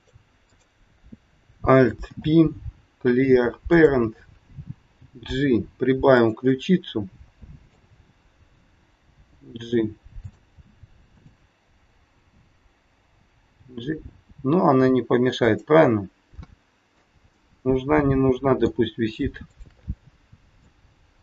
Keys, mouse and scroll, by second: 0.5 click, 1.9 alt+p, 4.8 g, 6.4 middle click, 9.1 g, 11.1 click, 13.6 g, 15.8 middle click, 17.3 middle click, 19.4 shift+click, 20.4 click.